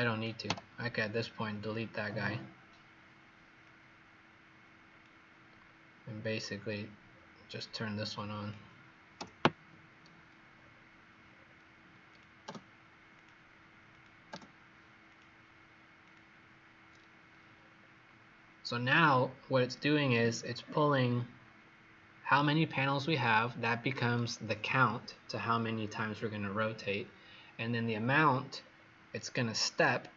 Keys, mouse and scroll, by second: 0.4 Delete, 1.2-3.3 scroll down 5, 3.5 click, 5.5 scroll up 2, 6.2-7.0 scroll up 2, 7.0-7.6 scroll down 2, 7.6 click, 9.1 Delete, 10.5-11.2 scroll down 3, 11.2 scroll up 1, 13.8 click, 17.4-18.6 scroll up 5, 18.6 scroll down 2, 19.7-20.5 scroll down 2, 20.5-24.6 scroll up 4, 28.5 scroll down 4, 29.2 scroll up 1.